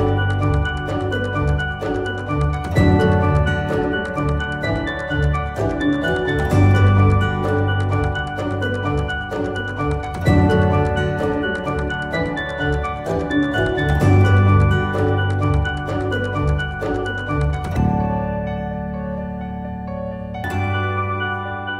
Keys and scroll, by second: 8.7-9.6 typing.